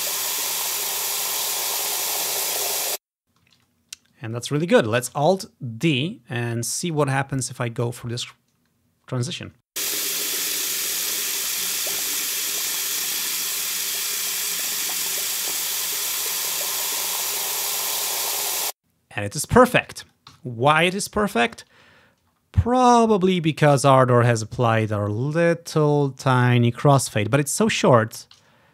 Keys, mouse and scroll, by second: 2.8 space, 3.3-3.7 scroll down 2, 3.7 click, 4.2 click, 4.8 ctrl+scroll down 1, 5.2 alt+d, 6.0 click, 6.9-8.8 drag, 9.6 space, 18.6 space, 19.5 click, 20.4 Delete, 20.7 click, 21.8-25.2 ctrl+scroll up 1, 26.5-26.9 scroll down 1, 28.3 ctrl+click.